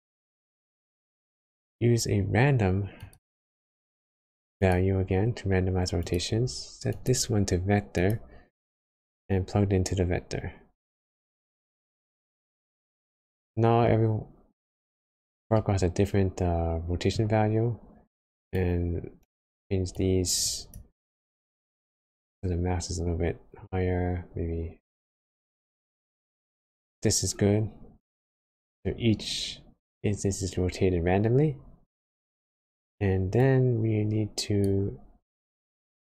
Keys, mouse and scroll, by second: 0.7 shift+a, 9.1 click, 13.3 middle click, 14.0 scroll up 1, 15.5 middle click, 17.4 scroll up 1, 19.9 click, 27.0 middle click, 35.3 click.